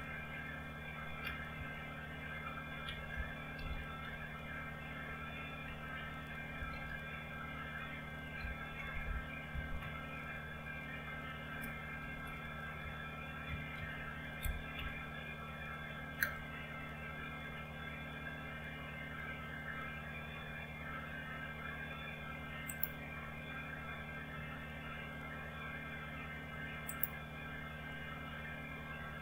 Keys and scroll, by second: 1.1-1.5 typing, 2.9-3.9 typing, 5.7-6.8 typing, 8.4-9.8 typing, 12.0-14.7 typing, 16.2 Return.